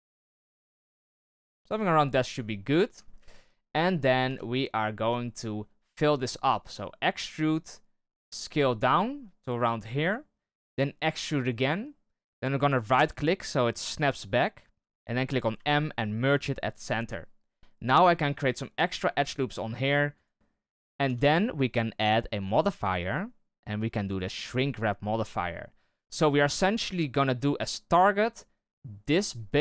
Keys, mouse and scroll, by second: 1.9-3.1 scroll down 2, 3.1 KP_1, 3.9-4.2 scroll up 2, 4.2 Tab, 4.7-6.6 scroll up 1, 7.0 e, 15.5 m, 18.0 ctrl+r, 21.0 Tab, 22.4-25.0 drag, 25.0-25.4 scroll down 3, 25.4-26.0 middle drag, 26.0-27.9 scroll up 1, 27.9 click.